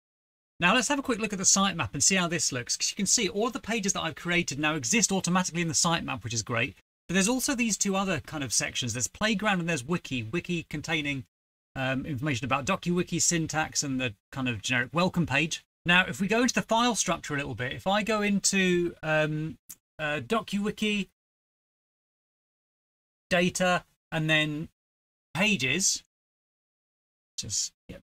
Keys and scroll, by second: 27.6 super+Right.